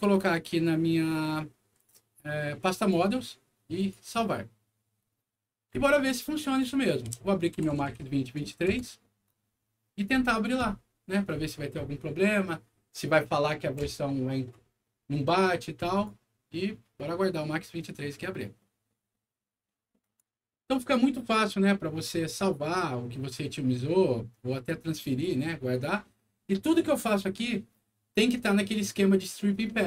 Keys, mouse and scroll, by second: 2.5 click, 2.7 click, 3.7 click, 6.4 click, 7.5 2, 8.9 Return, 15.9 click, 19.9 click, 23.3 scroll down 2, 23.9 scroll up 2, 25.0 click.